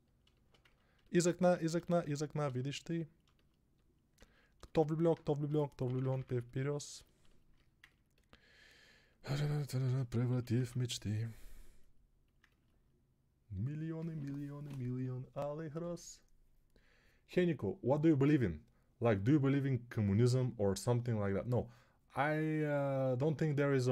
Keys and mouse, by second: 5.7 ], 5.8 ], 6.0 ], 6.1 ], 9.7 g, 10.2 ], 10.3 ], 10.5 ].